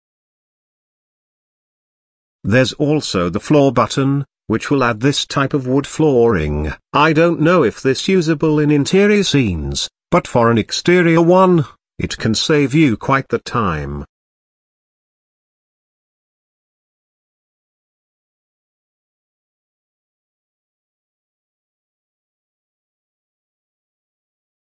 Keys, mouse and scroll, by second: 4.4 scroll down 3, 4.6 g, 5.6-6.0 shift+middle drag, 6.0-7.5 scroll up 2, 11.6-13.5 drag, 13.6-15.8 drag, 16.1-17.4 drag, 17.4-18.4 middle drag, 18.4-18.7 scroll up 2, 21.6-22.2 scroll down 2, 22.2-22.8 middle drag, 22.8-23.2 scroll down 3, 23.2-23.5 shift+middle drag, 23.5-24.1 scroll up 1, 24.1 shift+middle click.